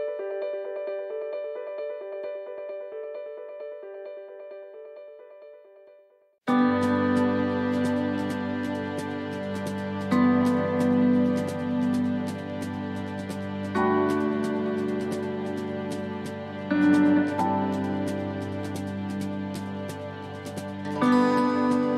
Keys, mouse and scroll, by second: 0.8 middle click, 1.4-2.1 scroll down 4, 2.6 middle click, 3.4-4.0 scroll up 4, 3.8 middle click, 4.8 right click, 5.8 shift+right click, 6.8 shift+right click, 7.3 click, 9.9 middle click, 10.6 scroll down 4, 10.8 middle click, 11.4 scroll down 1, 13.7 middle click, 14.3-16.8 scroll up 1, 16.8 middle click, 17.3-18.1 scroll up 2, 19.8 click.